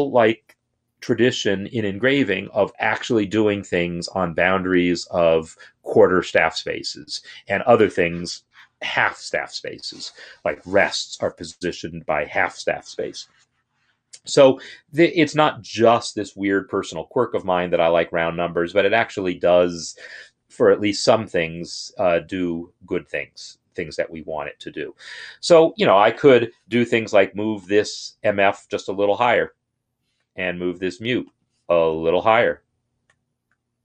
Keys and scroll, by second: 28.5 ctrl+Up, 31.8 ctrl+Up, 32.7 ctrl+Up, 33.4 ctrl+Up.